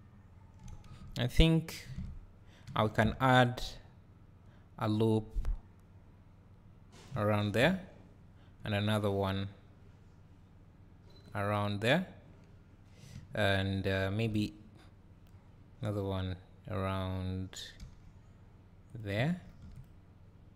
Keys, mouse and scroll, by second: 0.9 Tab, 1.5 click, 1.9 Tab, 2.8 ctrl+r, 7.1 click, 7.3 ctrl+r, 11.4 click, 14.0 ctrl+r, 16.0 click, 17.9 g, 19.0 click, 19.4 ctrl+r.